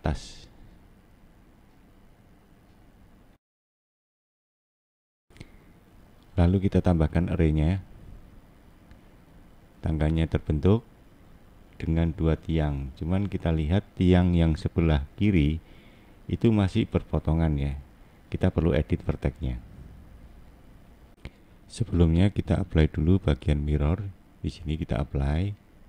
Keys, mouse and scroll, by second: 0.7 click, 7.6 click, 8.1-9.8 click, 10.1 click, 10.2 click, 10.4 click, 10.9 scroll down 2, 11.4 middle click, 12.5 scroll up 2, 13.3 middle click, 14.2 middle click, 15.5-16.1 scroll up 1, 16.1 middle click, 21.1 click, 24.0 click, 25.8 scroll up 1.